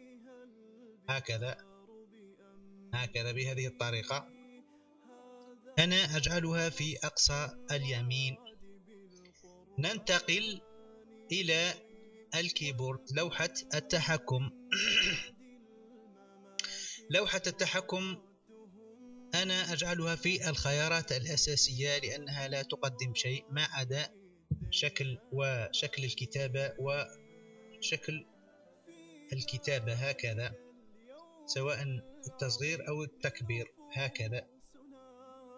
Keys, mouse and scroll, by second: 0.4 click, 1.1 click, 2.0-5.2 drag, 11.8-12.9 drag, 25.9 1, 28.3-29.4 drag, 29.7 1, 30.3 1, 32.1 click, 32.3 1, 32.8 1, 33.6 1, 34.0 1, 35.2 click.